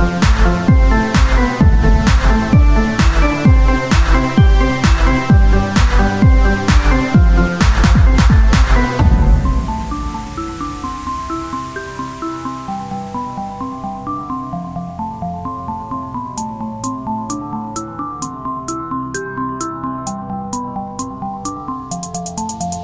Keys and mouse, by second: 1.4-5.9 drag, 5.9-7.1 right drag, 8.5 t, 9.9-10.9 drag, 16.0 z, 18.8 z, 19.0 middle click, 19.5-20.7 drag, 20.8-22.5 drag.